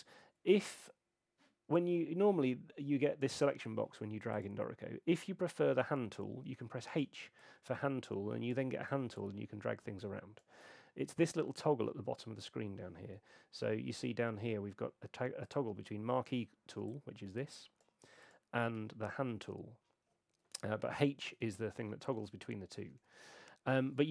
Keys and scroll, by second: 7.0 h, 13.1 F5, 21.3 h.